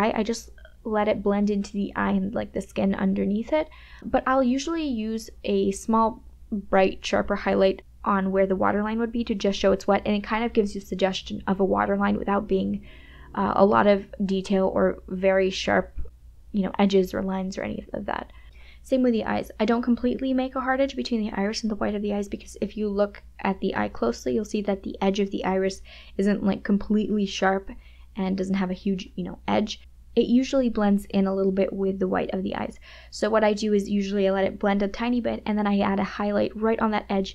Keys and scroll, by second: 0.4 KP_Subtract, 1.0 ], 2.7 KP_Add, 2.8 [, 4.5 [, 16.6 KP_Subtract, 20.9 KP_Add, 24.6 KP_Add.